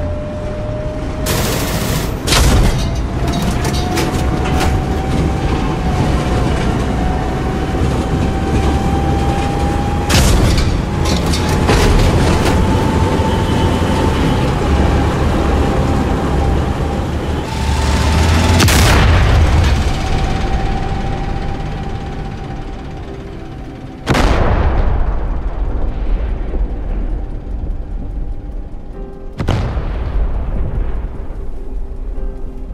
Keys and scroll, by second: 0.8 d, 3.6 a, 5.2 e, 13.5 d, 14.0 e, 14.9 d, 17.3 w, 21.1 d, 24.5 d, 24.9 d, 25.8 d, 26.9 d, 28.1 d, 29.4 d, 30.5 d, 31.9 d.